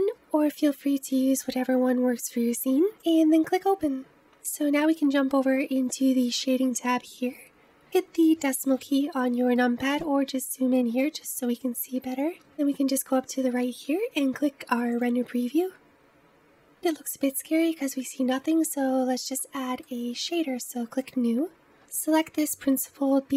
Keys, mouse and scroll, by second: 6.3 click, 7.8 KP_Decimal, 9.0-9.5 scroll down 2, 9.5-12.4 middle drag, 12.4-13.2 scroll down 1, 13.2-15.8 scroll down 1, 15.8 click, 16.6-18.7 middle drag, 18.7-19.4 scroll down 1, 19.4-21.6 middle drag, 21.6-23.3 drag.